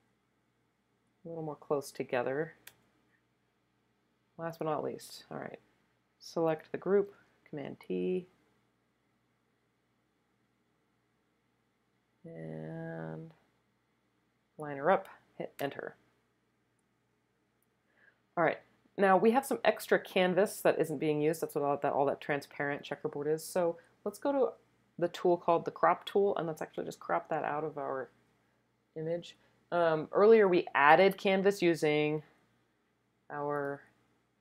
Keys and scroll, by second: 2.6 Return, 7.1 super+t, 15.6 Return.